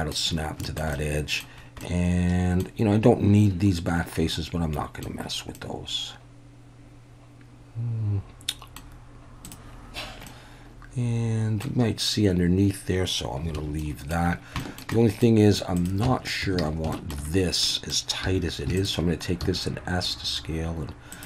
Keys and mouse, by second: 0.6 shift+middle drag, 0.9-1.4 middle drag, 1.8-2.6 middle drag, 4.3-5.0 middle drag, 5.5-8.8 middle drag, 9.4 click, 10.3-11.6 middle drag, 13.6 alt+a, 13.8 middle drag, 14.6 shift+middle drag, 14.9 middle drag, 15.8 click, 16.1 Tab, 16.6 alt+a, 16.9 shift+middle click, 17.7 middle click, 18.2 2, 19.4 s, 21.1 click.